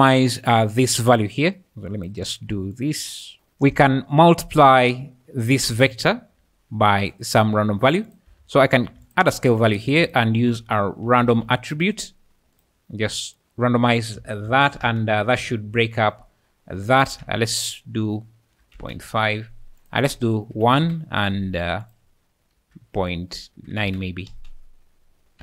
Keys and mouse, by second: 0.5 middle click, 2.7 click, 8.1 click, 8.7 shift+d, 9.8 shift+a, 14.8 space, 17.3 Escape, 17.5-18.9 drag, 19.8-20.8 drag, 21.9-23.8 drag, 24.3 space.